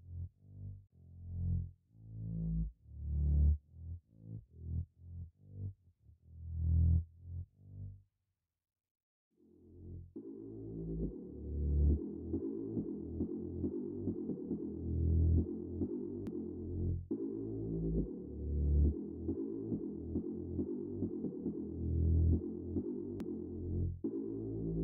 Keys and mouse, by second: 2.9 click, 4.4 g, 5.2 click, 6.2 right click, 16.4 click, 24.1 g.